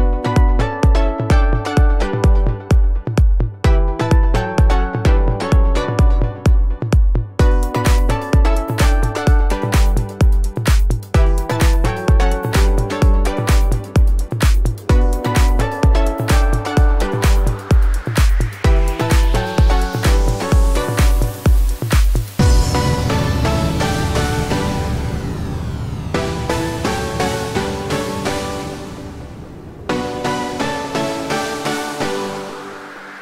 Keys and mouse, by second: 0.5 f, 1.7 2, 5.1 3, 5.9 e, 8.1 g, 9.0 3, 10.2 g, 11.3 2, 11.7 g, 12.3 g, 13.1 g, 15.1 2, 15.3 3, 16.5 g, 17.9 g, 21.0 3, 21.4 g, 22.4 1, 22.4 g, 23.4 click, 24.0 g, 24.2 middle click, 25.1-28.0 alt+middle drag, 26.0 2, 27.1 2, 28.0-33.2 right drag, 30.5 2.